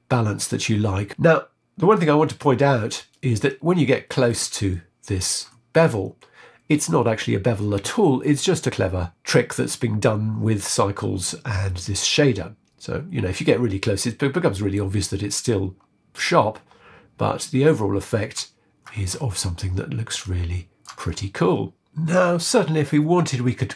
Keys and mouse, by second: 0.6 middle click, 3.5 middle click, 4.7 shift+middle click, 8.7 click, 11.5-14.7 middle drag, 19.2-20.9 shift+middle drag, 21.3-22.4 shift+middle drag.